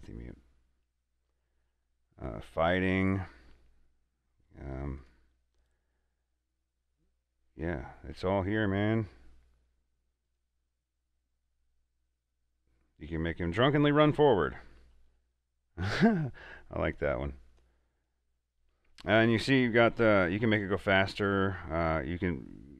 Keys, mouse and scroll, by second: 1.6 scroll down 1, 3.0 scroll down 1, 5.2 click, 7.6 scroll down 1, 8.3 scroll up 1, 10.5 click, 10.5 click, 13.0 scroll down 1, 13.9 click, 14.4 scroll down 1, 16.4 click, 17.3 scroll up 1, 17.8-20.8 drag, 22.4 click, 22.4 click.